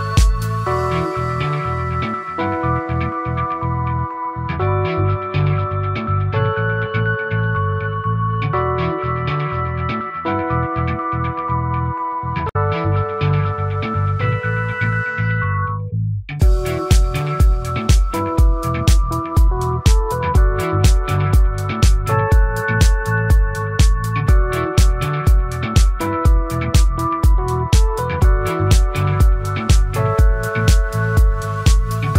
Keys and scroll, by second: 18.3 ctrl+z, 26.3 ctrl+z.